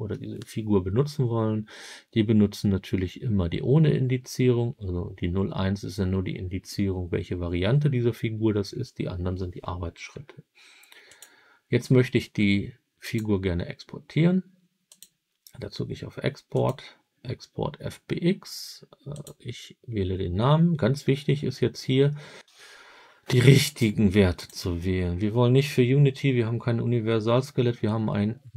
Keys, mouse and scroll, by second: 11.0 click, 12.9 click, 14.8 click, 16.4 click.